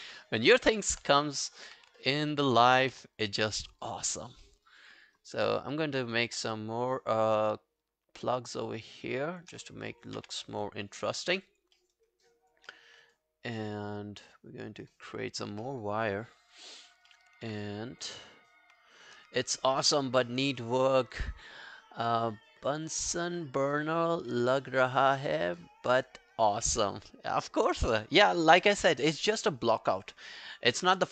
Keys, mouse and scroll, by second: 0.2 alt+middle click, 0.5 alt+scroll down 1, 0.6 alt+click, 1.7 e, 2.0 alt+middle click, 2.2 alt+right click, 2.4 alt+click, 2.9 w, 3.2 alt+click, 3.5 alt+middle click, 3.9 alt+click, 4.2 alt+right click, 4.5 alt+middle click, 4.7 alt+right click, 4.9 alt+click, 5.2 alt+right click, 5.8 alt+middle click, 5.8 right click, 6.0 alt+right click, 6.2 alt+click, 6.8 shift+click, 9.7 alt+scroll down 1, 9.9 alt+click, 10.2 q, 10.4 scroll down 2, 10.7 alt+click, 11.0 alt+middle click, 11.3 alt+right click, 11.5 alt+click, 11.8 alt+middle click, 12.0 alt+right click, 12.3 alt+click, 12.7 alt+middle click, 12.9 alt+right click, 13.2 alt+click, 15.6 alt+middle click, 16.2 alt+right click, 16.4 alt+click, 17.1 alt+middle click, 18.0 alt+scroll down 1.